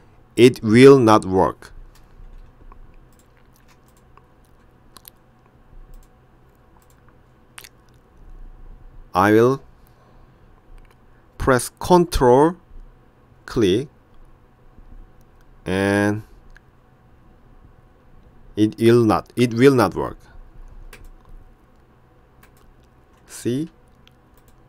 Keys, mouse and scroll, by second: 3.2 click, 4.0 shift+click, 6.0 click, 21.0 ctrl+click, 22.5 ctrl+click, 24.5 ctrl+click.